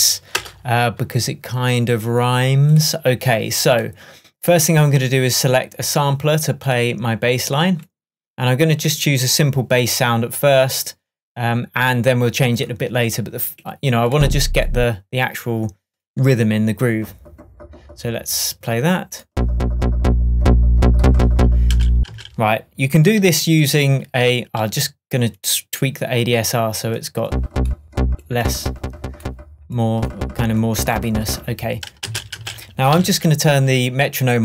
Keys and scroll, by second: 0.3 e, 0.4 Return, 21.7 space, 32.1 space, 32.9 k.